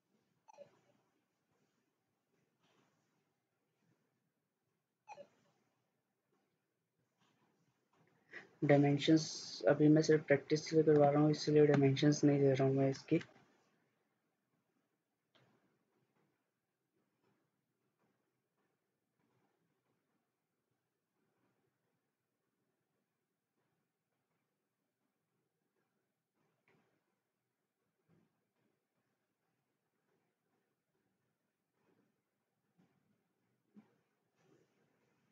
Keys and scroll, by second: 7.8 Escape, 13.3 ctrl+z, 29.7 Escape.